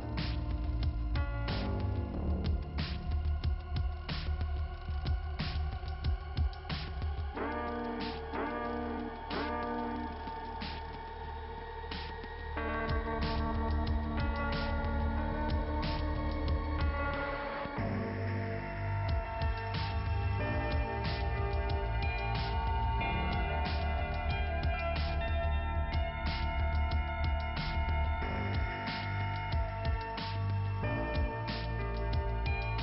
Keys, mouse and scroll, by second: 0.1 scroll down 1, 0.4 middle click, 1.6 scroll down 1, 3.5 scroll up 2, 5.7 scroll down 1, 7.8 middle click, 11.0 scroll down 2, 12.2 click, 13.1 click, 13.8 scroll down 1, 16.1 click, 19.9 click, 20.9-21.5 scroll up 1, 21.9 click, 23.0 click, 23.9 click, 24.6 right click, 25.6 click, 27.2 click, 30.7 click, 31.5 click, 32.0 scroll down 2, 32.6 click.